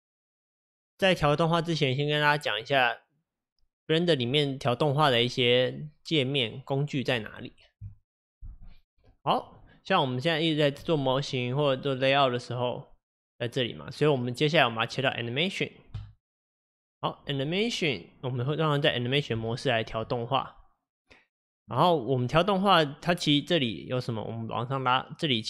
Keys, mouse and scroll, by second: 11.4-16.1 drag, 18.5-25.4 middle drag.